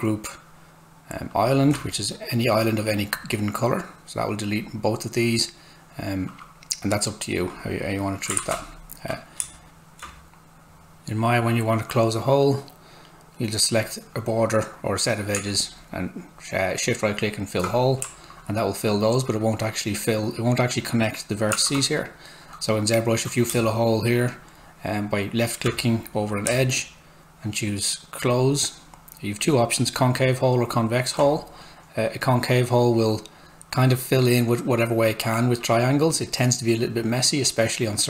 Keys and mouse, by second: 1.3 click, 1.4 space, 4.5 click, 7.5 click, 8.4 ctrl+z, 9.4 space, 10.6 Tab, 12.4 right click, 13.5 click, 15.7 shift+right click, 21.7 alt+Tab, 23.5 space, 28.3 click, 28.4 space, 29.4 click, 29.5 space, 32.1 click.